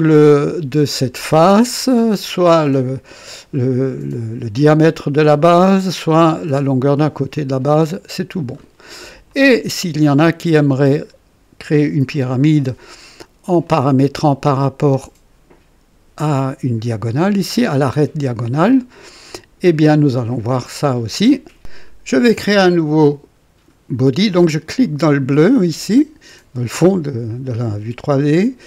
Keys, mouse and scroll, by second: 0.4 click, 1.8-2.7 drag, 7.3-8.7 drag, 9.3-11.2 drag, 13.6-14.8 drag, 24.8 click.